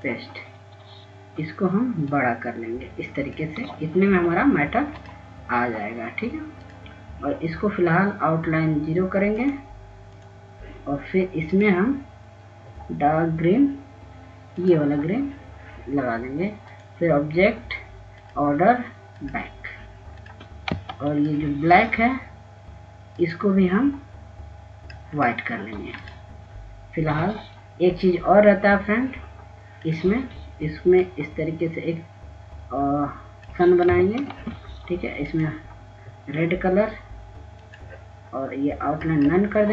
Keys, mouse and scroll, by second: 4.5 shift+click, 7.8-8.2 scroll down 1, 9.1 click, 12.7 click, 23.4 F2, 23.8 click, 27.5 right click, 28.6-36.6 drag, 36.9 ctrl+space, 38.0 click.